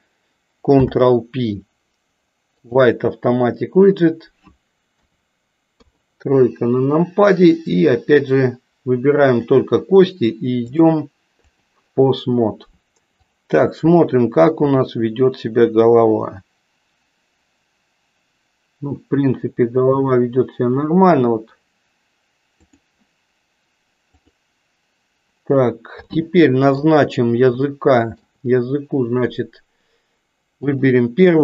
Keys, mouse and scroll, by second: 0.6 ctrl+p, 5.0 KP_4, 5.8 KP_3, 9.4 click, 10.6-11.7 drag, 14.7 r, 26.1 middle click, 27.7 shift+middle click.